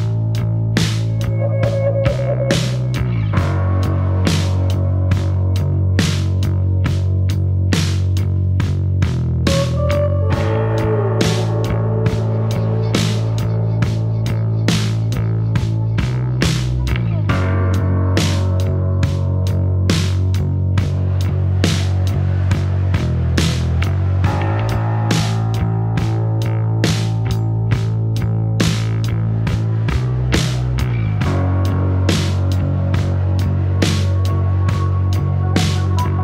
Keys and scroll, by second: 9.8 4, 16.1 5, 22.4 2, 22.5 Return.